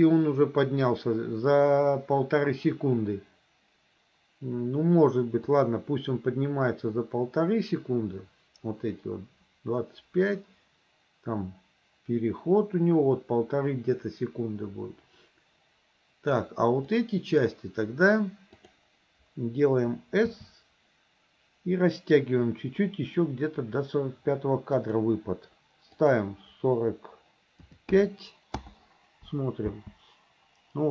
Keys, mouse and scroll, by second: 5.5-16.4 drag, 16.9-17.5 drag, 18.7 click, 20.3 s, 26.0-28.7 drag, 29.7 space.